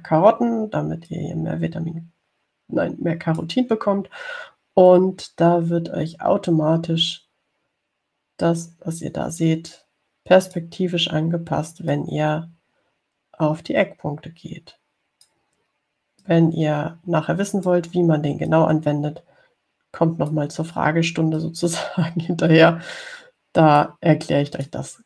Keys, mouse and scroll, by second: 2.3-4.8 drag, 6.1-12.0 drag, 13.2-16.7 drag, 17.5-19.1 drag, 19.7-21.7 drag, 22.6-25.0 drag.